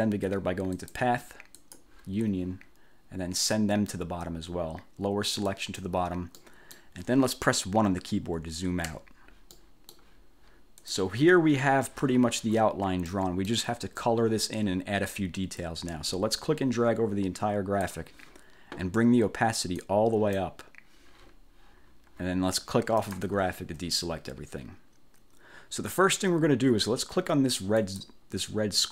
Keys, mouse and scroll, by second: 0.9 click, 1.7 click, 5.6 click, 6.5 click, 9.0 1, 9.6 click, 10.9 click, 13.2 click, 16.4-18.1 drag, 19.8 click, 23.2 click, 27.9 click.